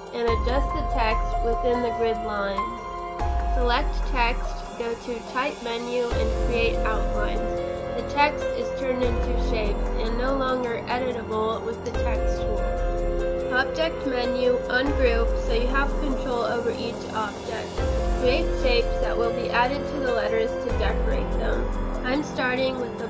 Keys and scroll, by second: 0.9 space, 3.7 Down, 3.9 Left, 4.5 space, 10.1 space, 12.5 space, 19.8 space, 20.7 Left.